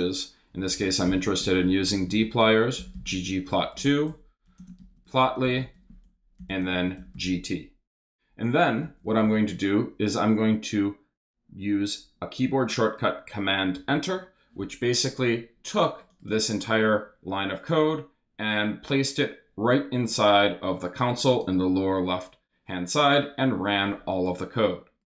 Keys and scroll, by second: 0.3-7.6 typing, 8.8 Right, 13.7 super+Return.